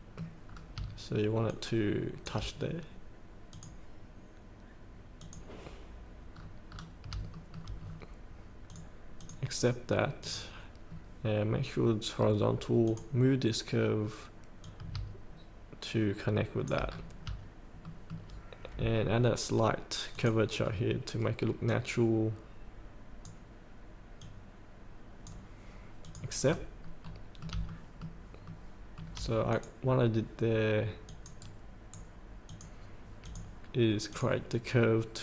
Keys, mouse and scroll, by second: 0.5 scroll down 1, 1.5 shift+click, 3.5-4.6 drag, 5.6 click, 6.4 scroll down 1, 7.3 shift+middle click, 7.9 scroll down 1, 8.7 click, 10.9 scroll down 1, 12.8 scroll down 1, 16.9-17.5 scroll up 2, 17.8 shift+middle click, 20.1 click, 20.6 scroll down 1, 21.7-26.0 drag, 26.4 scroll up 1, 27.0 middle click, 27.8 shift+middle click, 28.5 shift+middle click, 29.5 click, 29.9 scroll down 1, 31.1 click, 31.4 right click, 32.5-35.2 drag.